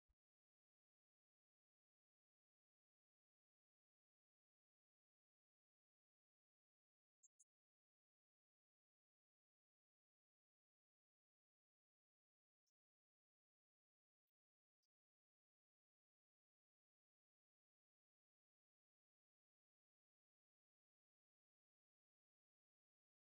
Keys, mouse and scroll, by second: 1.4-9.6 drag.